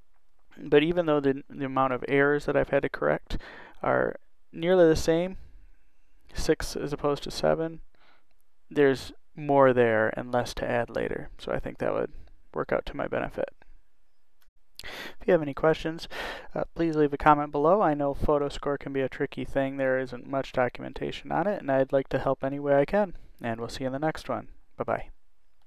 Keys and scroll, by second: 6.7 6.